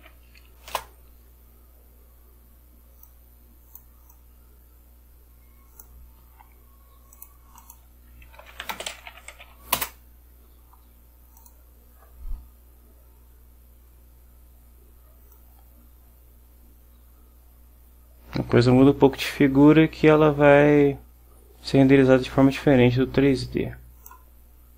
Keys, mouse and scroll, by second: 0.0-0.5 typing, 0.8 Return, 3.1-4.0 drag, 4.2-6.1 drag, 7.2 click, 7.7 click, 8.3-10.1 typing, 11.5 click, 15.4-24.4 drag.